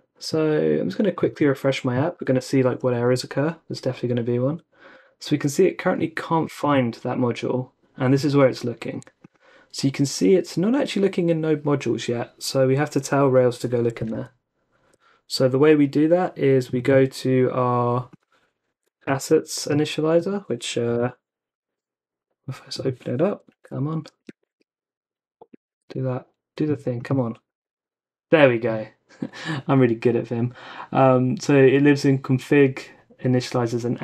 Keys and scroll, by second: 3.0 super+r, 14.1 super+Tab, 18.8-19.5 typing, 20.9 typing, 23.5-24.4 typing, 25.4 typing, 27.5 typing, 28.8 typing.